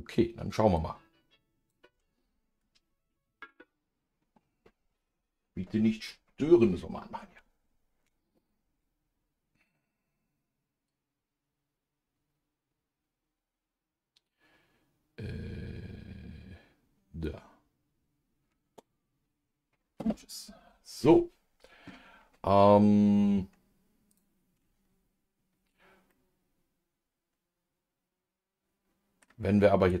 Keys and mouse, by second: 24.1 click, 26.1-30.0 middle drag.